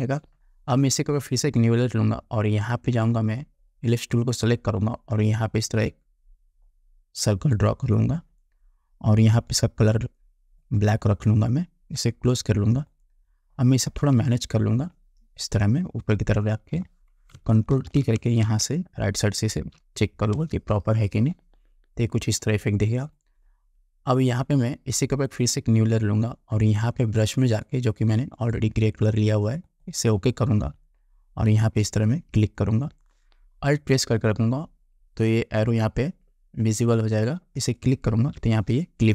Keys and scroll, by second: 17.8 ctrl+t, 20.5 Return.